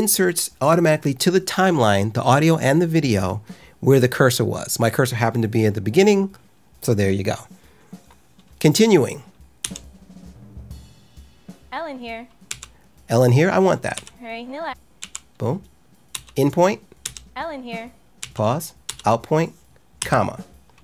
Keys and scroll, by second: 9.5 l, 12.4 k, 13.9 j, 14.9 k, 16.0 i, 17.0 l, 18.1 k, 18.8 o, 19.9 ,.